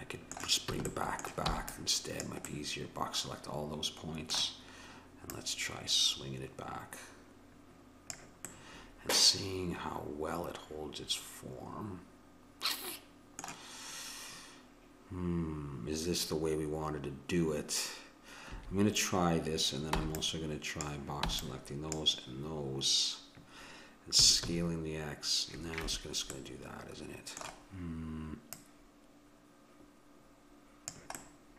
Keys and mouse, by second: 0.8 a, 1.5 b, 3.2 middle click, 5.3-7.2 drag, 8.7-10.4 middle drag, 18.6 a, 20.0 b, 21.3 b, 24.2 s, 26.3-28.5 middle drag, 28.5-30.3 drag, 31.2-31.5 middle drag.